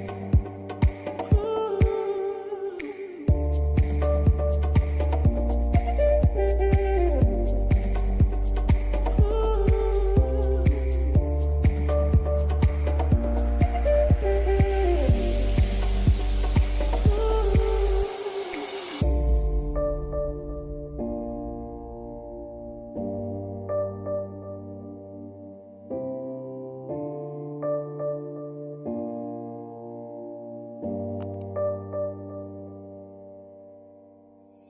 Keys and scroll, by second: 32.7 ctrl+z.